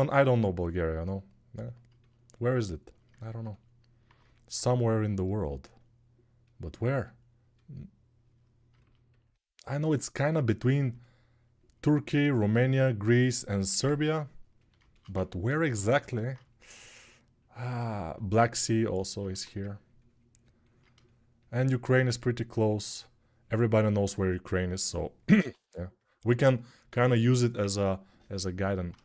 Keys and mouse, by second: 3.4-13.0 alt+drag, 13.0-15.6 alt+right drag, 15.6-29.0 drag, 19.1 1.